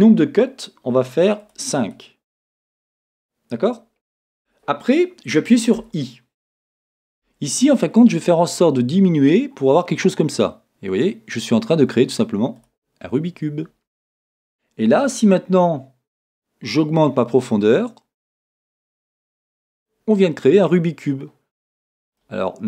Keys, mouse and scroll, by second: 1.4-3.7 drag, 16.3-22.2 drag, 22.2-22.6 middle drag.